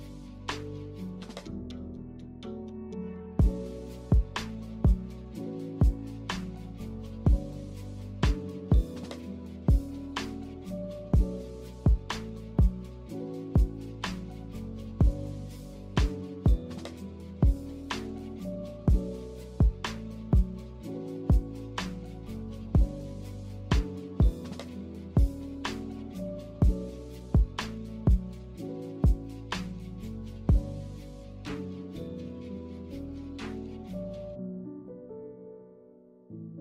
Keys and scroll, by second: 7.1 a, 31.6 a.